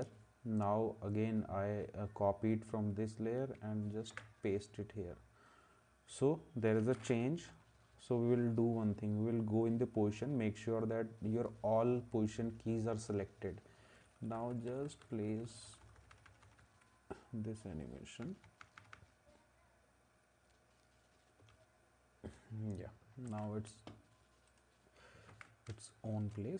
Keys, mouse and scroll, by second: 4.1 ctrl+v, 7.5 o, 13.9 Up, 14.2 Up, 14.3 Up, 14.5 Up, 14.7 Up, 14.8 Up, 15.0 Up, 15.3 Right, 15.5 Right, 15.6 Right, 15.8 Right, 16.0 Right, 16.1 Right, 16.3 Right, 16.4 Right, 16.6 Right, 18.2 Right, 18.4 Right, 18.6 Right, 18.8 Right, 18.9 Right, 21.4 Left, 23.2 ctrl+s, 25.3 ctrl+s.